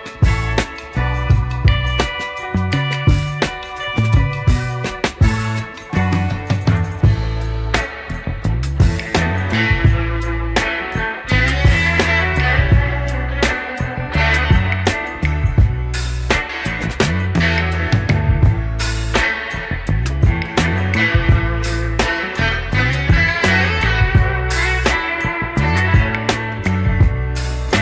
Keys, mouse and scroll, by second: 1.0 s, 3.5 s, 6.2-6.6 scroll down 2, 6.9 shift+middle drag, 7.4 shift+d, 10.7 click, 11.2 click, 11.7-14.7 middle drag, 15.0-15.4 scroll down 2, 15.4-16.5 middle drag, 17.0 shift+middle drag, 17.5-18.5 scroll down 2, 17.7-20.0 middle drag, 20.6 shift+s, 21.8 click, 22.7 shift+s, 23.9 click, 24.2-24.8 middle drag, 25.0 click, 25.6 click, 26.3 middle click, 26.6 click, 27.1 click, 27.6 scroll up 2.